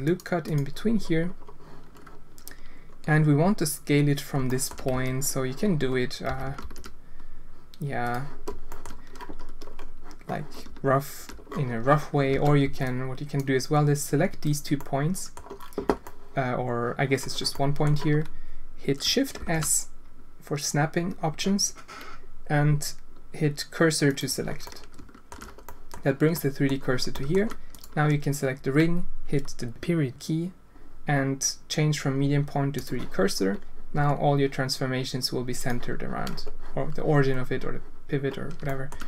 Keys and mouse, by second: 4.4 shift+drag, 4.9 z, 6.2 s, 8.7 shift+click, 12.3 alt+a, 12.6 b, 14.7 click, 16.1 click, 16.7 click, 17.5 click, 19.4 shift+s, 24.7 click, 25.6 click, 26.3 click, 27.1 alt+shift+click, 27.7 alt+click, 33.9 s, 38.6 shift+click.